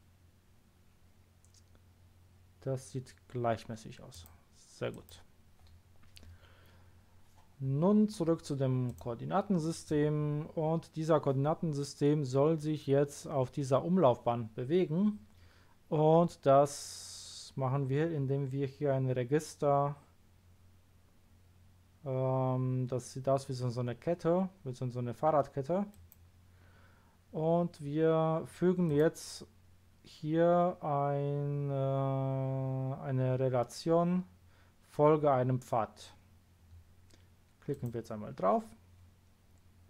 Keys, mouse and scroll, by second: 4.1 click, 4.9 click, 8.8 click, 10.4 scroll down 1, 25.9 click, 28.8 click, 37.7 click.